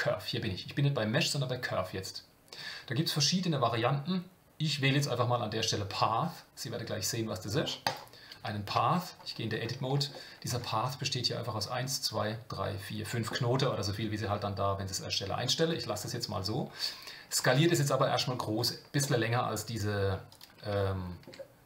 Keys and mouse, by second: 8.7 Tab, 10.1 shift+middle click, 17.4 s, 20.8 shift+middle click.